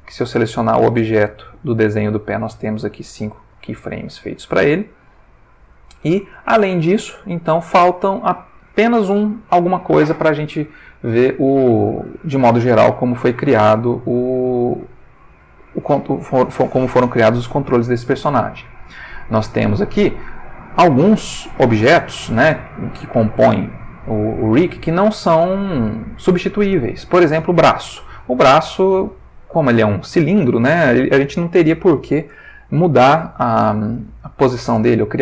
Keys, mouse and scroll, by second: 1.2 click, 5.2 click, 6.0-6.8 ctrl+middle drag, 7.0-7.8 ctrl+shift+middle drag, 11.3-12.1 shift+middle drag, 13.7-14.5 shift+middle drag, 15.0-15.8 ctrl+middle drag, 19.2 click.